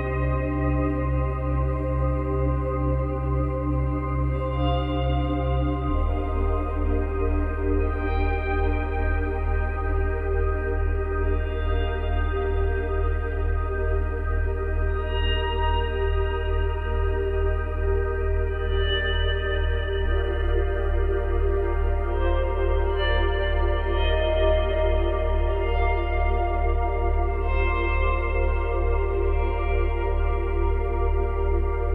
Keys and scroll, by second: 1.2 space, 4.4 space, 8.5 space.